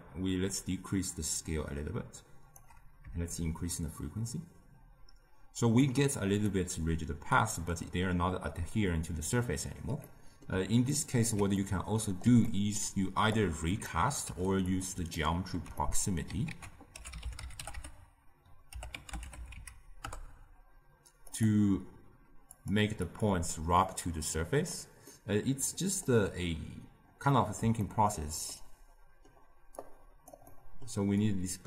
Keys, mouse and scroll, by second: 3.2-6.3 shift+drag, 6.4-9.4 middle drag, 10.0-13.3 middle drag, 13.3 click, 14.2 g, 15.0-16.4 ctrl+middle drag, 16.4 ctrl+a, 22.5-25.0 drag, 25.0-29.7 middle drag, 29.7 click, 30.4-31.1 middle drag, 31.1 click.